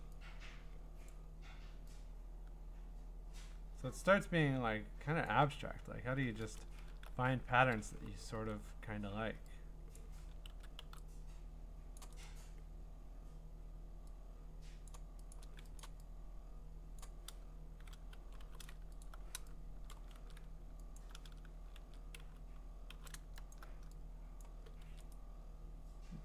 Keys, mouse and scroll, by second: 1.1 click, 5.2 click, 5.9 Return, 6.7 scroll, 7.6-8.8 typing, 8.1 middle click, 10.0 click, 10.5 ctrl+z, 10.8 x, 11.9 click, 12.2 right click, 14.9 click, 15.3 click, 15.8 click, 17.0 click, 18.2 n, 18.4 n, 19.0 alt+click, 20.1 ctrl+z, 20.1 click, 21.0 alt+click, 21.8 ctrl+z, 22.2-22.9 typing, 23.5 alt+click, 24.4 click, 24.9 ctrl+z, 25.1 right click.